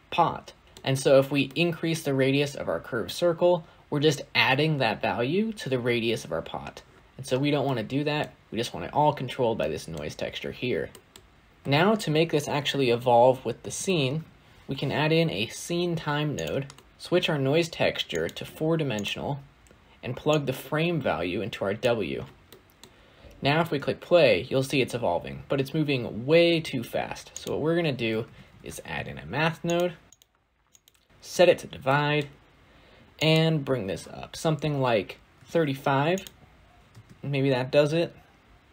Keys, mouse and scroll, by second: 14.5 shift+a, 16.8 click, 18.3-21.7 drag, 22.3-22.8 middle drag, 22.8-23.4 scroll up 2, 23.4 space, 26.3 space, 29.6 shift+a, 31.2-36.1 drag, 36.8 space.